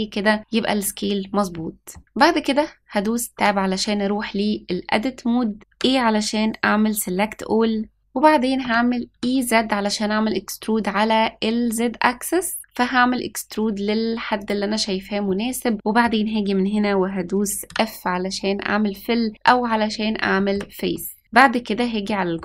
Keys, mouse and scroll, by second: 1.5-1.9 middle drag, 3.3 Tab, 5.6 a, 6.9-7.6 scroll up 3, 8.0 middle click, 8.0-8.5 scroll down 1, 8.5 e, 15.2 middle click, 17.7 f, 19.7-20.1 scroll up 1, 20.3 shift+middle click, 20.9 middle click, 21.4-21.8 scroll up 1, 22.0 shift+middle click.